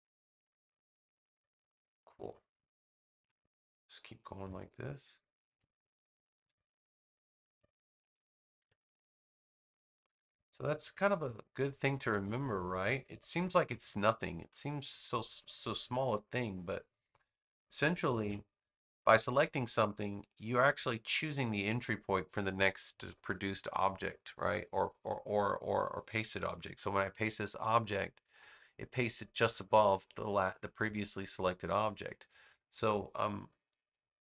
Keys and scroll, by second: 1.9 space, 6.2 super+x, 8.5 super+v, 13.5 space, 18.1 super+x, 27.1 super+v.